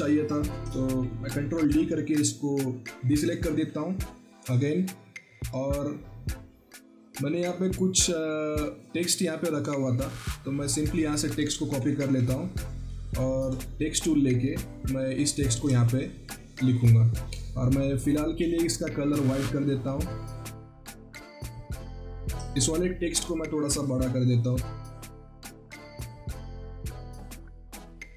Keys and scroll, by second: 1.5 ctrl+d, 11.6 ctrl+c, 12.0 ctrl+alt+Tab, 16.6 ctrl+a, 20.6 ctrl+t, 22.7 ctrl+t.